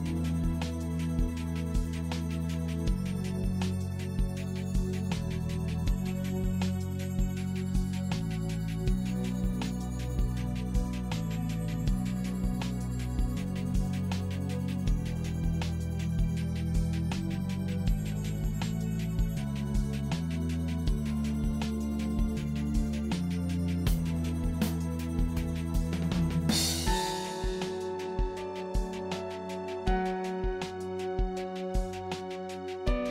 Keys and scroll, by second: 6.7 Return, 7.0 Right, 13.6 ctrl+l, 24.3 1, 25.5 1.